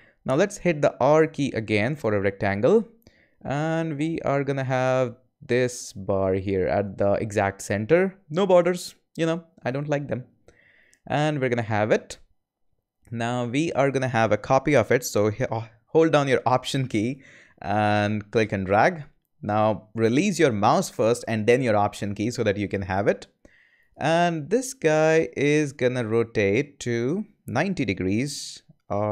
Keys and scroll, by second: 1.0 r.